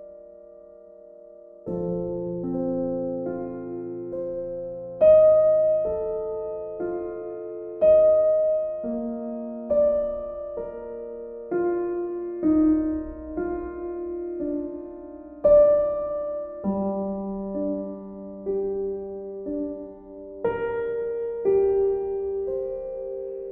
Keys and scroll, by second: 21.7 e.